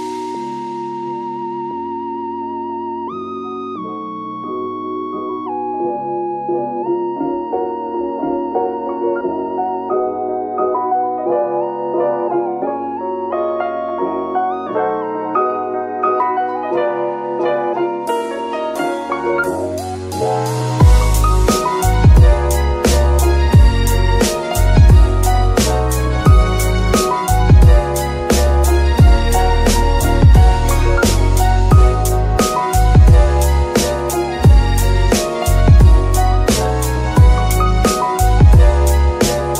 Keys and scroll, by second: 0.2 shift+a, 5.3-7.2 typing, 7.4 Return, 22.6 KP_3, 23.4 g, 23.6 z.